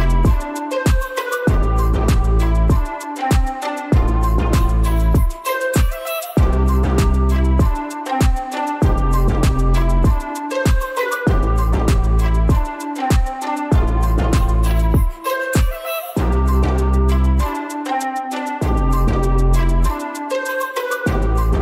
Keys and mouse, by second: 6.2 ctrl+r, 12.5 ctrl+s, 13.4 Tab, 14.0 Tab, 16.0 3, 16.9 click, 17.5 shift+click, 17.9 shift+click.